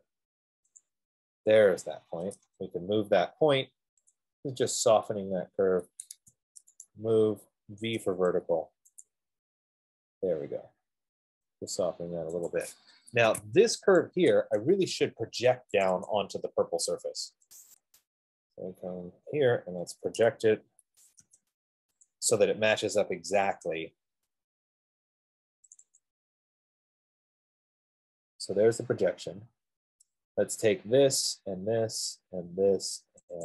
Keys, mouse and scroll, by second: 0.1 click, 1.2 click, 2.3-2.9 typing, 4.4 click, 6.3 Escape, 7.2 right click, 8.2 typing, 9.4 click, 12.4 Return, 12.8 click, 13.6 Escape, 13.7 Escape, 14.4 click, 16.1 click, 16.6 click, 18.2 click, 19.1 scroll, 20.2-21.6 typing, 21.0 middle click, 22.6 click, 23.7 Return, 26.0 click, 26.4 click, 27.8-28.5 scroll, 29.5-29.8 scroll, 31.0 shift+click, 31.1 shift+click, 31.3 middle click, 32.5 shift+click.